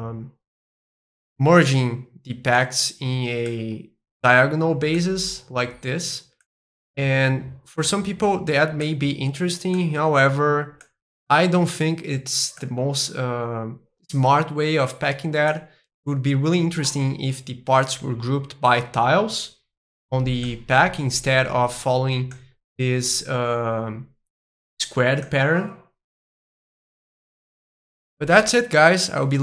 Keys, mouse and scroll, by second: 0.8 middle click, 1.7-2.5 scroll up 2, 2.5-4.5 middle drag, 4.9-7.0 middle drag, 7.8-9.9 middle drag, 10.8-12.8 middle drag, 15.4-17.5 middle drag, 20.4-22.4 middle drag, 25.2-27.2 middle drag, 27.4-29.4 drag.